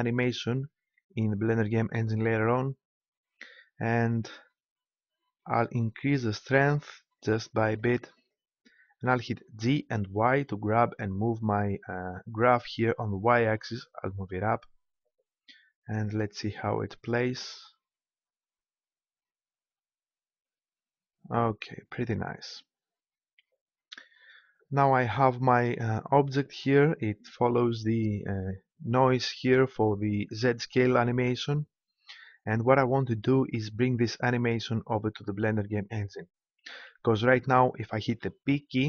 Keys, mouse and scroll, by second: 9.6 g, 22.1-23.8 drag, 38.1 p.